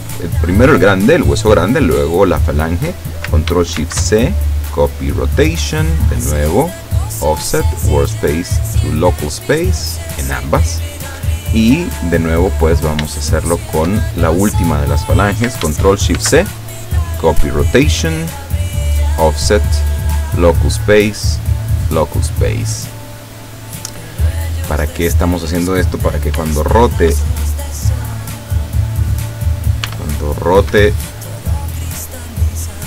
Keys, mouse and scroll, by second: 3.8 ctrl+shift+c, 4.7 click, 6.6 click, 7.2 click, 7.7 click, 8.7 click, 9.3 click, 10.0 click, 12.5 right click, 13.4 shift+right click, 16.2 ctrl+shift+c, 17.0 click, 18.4 click, 19.0 click, 19.5 click, 20.2 click, 20.9 click, 21.8 click, 24.9 right click, 26.4 r, 27.2 Escape, 27.8 right click, 29.0 right click, 29.9 r, 30.8 Escape.